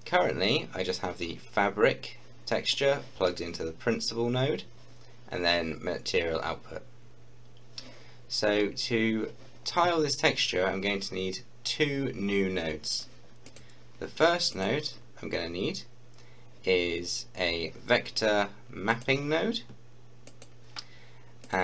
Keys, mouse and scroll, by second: 13.4 click, 18.9 click.